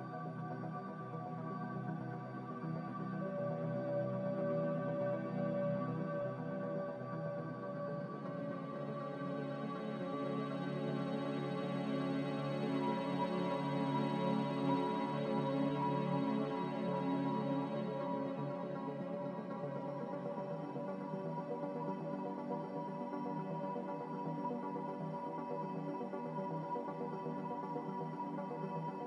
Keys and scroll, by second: 4.2 z, 8.7-9.6 typing, 13.5 Return, 19.8 a, 21.8 z, 25.6-26.4 typing.